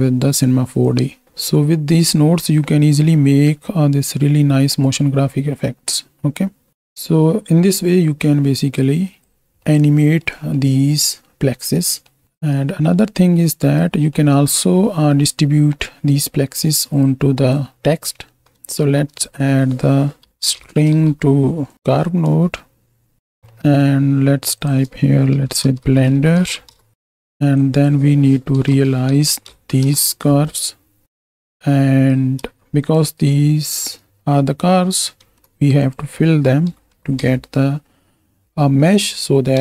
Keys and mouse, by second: 0.9-9.4 drag, 9.9 click, 12.1 drag, 12.3 right click, 12.8-13.9 right drag, 14.0 middle click, 14.9 middle click, 16.9 click, 17.7 click, 18.2 middle click, 18.8 shift+a, 23.6 middle click, 24.5-26.7 drag, 27.7-29.9 drag, 31.0-32.1 right drag, 34.9 middle click, 35.2 shift+a.